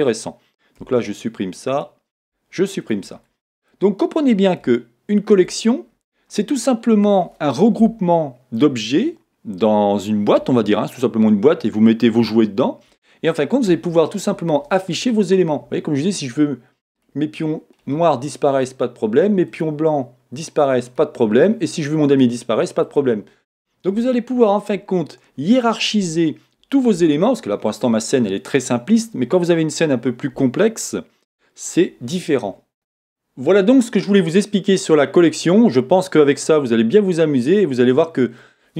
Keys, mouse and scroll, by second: 1.1 x, 1.8 click, 2.2 x, 3.2 scroll down 1, 3.7 middle click, 5.5 scroll up 1, 6.1 scroll down 1, 6.5 middle click, 16.9 click, 32.7 shift+middle click.